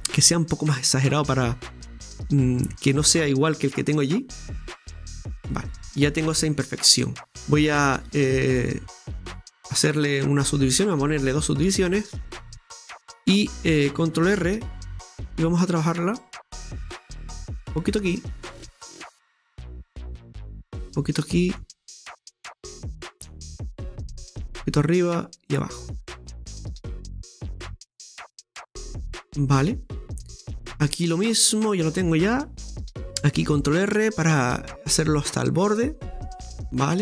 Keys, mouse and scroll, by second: 0.9 right click, 1.9 g, 3.6 Tab, 3.8-4.3 scroll down 4, 4.3-7.3 scroll down 1, 7.3-10.5 drag, 12.2-12.8 scroll up 1, 12.8-14.3 scroll up 1, 14.3 middle click, 14.3 Delete, 21.2 middle click, 22.0-22.6 scroll up 2, 22.6-23.8 middle drag, 23.8 ctrl+r, 25.9 ctrl+r, 28.6-29.0 scroll down 1, 29.0-32.0 middle drag, 32.8 shift+middle click, 33.4 ctrl+r, 36.9-37.0 scroll down 1.